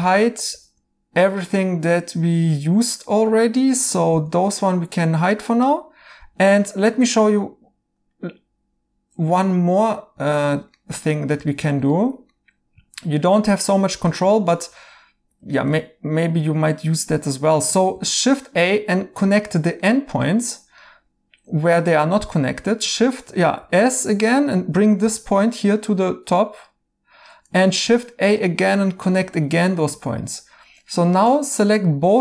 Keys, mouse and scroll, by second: 0.6-1.3 typing, 4.1 h, 4.6 right click, 6.1 h, 6.6 right click, 9.3 right click, 14.3 right click, 17.9 a, 19.8 right click, 22.3 right click, 23.6 s, 25.0 g, 27.7 a, 29.5 right click, 31.8 right click.